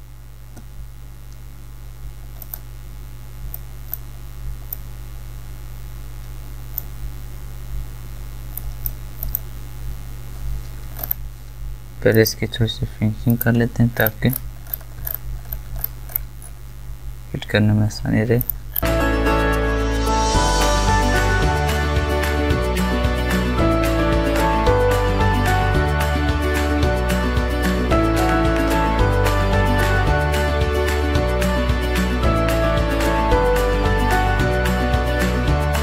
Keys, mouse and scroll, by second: 2.4-8.6 drag, 11.0-11.3 alt+scroll up 1, 12.1 click, 12.2 click, 14.0 alt+scroll up 1, 14.6-16.4 scroll up 5, 16.4 scroll down 1, 18.6 click, 18.7 alt+scroll up 1, 19.0 alt+right click, 19.1 click, 19.7 ctrl+alt+z, 19.8 alt+right click, 19.9 click, 20.2 ctrl+click, 20.6 alt+right click, 20.7 click, 21.4 right click, 21.5-23.1 drag, 23.1 alt+right click, 23.2 click, 24.4 click, 24.7 alt+right click, 24.8 click, 26.0 alt+scroll down 1, 26.1-26.4 ctrl+scroll up 2, 26.4 alt+right click, 26.5 alt+click, 27.3 alt+scroll down 1, 27.7 click, 27.8 alt+scroll up 1, 28.0 alt+right click, 28.0 alt+click, 29.0 alt+right click, 29.1 click, 29.7-32.3 alt+drag, 32.3 alt+right click, 32.6 click, 33.3 alt+right click, 33.5 click, 34.4 alt+scroll down 1, 34.6 ctrl+scroll up 2, 34.7 alt+right click, 34.9 click, 35.2 alt+scroll down 1, 35.7 ctrl+d.